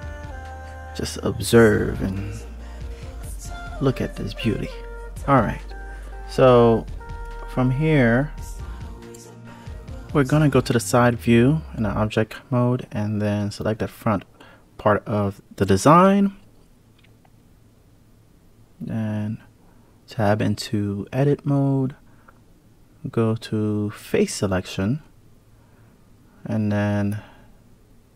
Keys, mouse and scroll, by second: 6.8 click, 8.1-9.3 drag, 9.7-11.0 scroll up 10, 11.7 click, 12.3-12.9 scroll down 1, 12.9 click, 18.3 click, 19.0 click, 20.3 Tab, 20.9 Tab, 21.5 Tab, 24.9 3, 25.4 click.